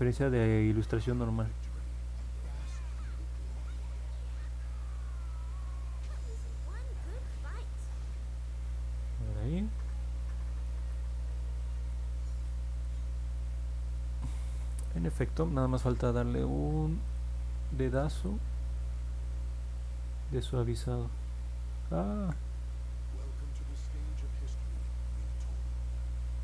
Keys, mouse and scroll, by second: 9.4 middle click, 9.9-12.4 alt+drag, 12.8-14.4 alt+drag, 14.7 middle click, 15.2 alt+click, 17.0 click, 17.9 alt+click, 20.5 click, 22.1 ctrl+z, 24.7 middle click, 24.7-25.1 scroll down 2, 25.0 middle click, 25.3-26.4 alt+drag.